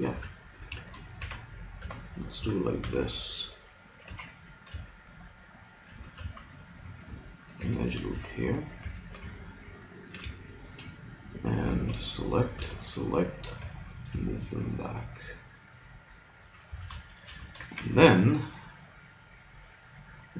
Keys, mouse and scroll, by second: 0.2 a, 1.2 ctrl+r, 2.4 a, 2.9 b, 4.1 g, 6.2 ctrl+z, 7.7 ctrl+r, 8.9 a, 11.7 b, 12.6 b, 13.6 g, 16.7 a, 17.7 ctrl+Tab.